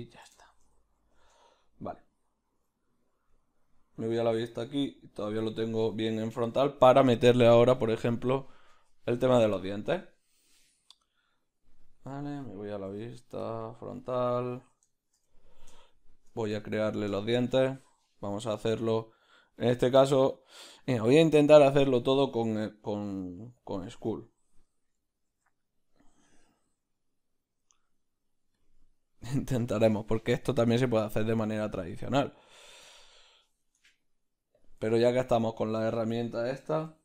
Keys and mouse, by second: 1.4 Tab, 2.7 z, 4.0 Left, 13.5 q, 13.7 middle click, 14.9 shift+middle click, 15.7 shift+middle click, 15.7 q, 16.6 click, 25.3 ctrl+2, 32.9-34.7 drag, 34.7 b, 34.9-36.8 ctrl+middle drag.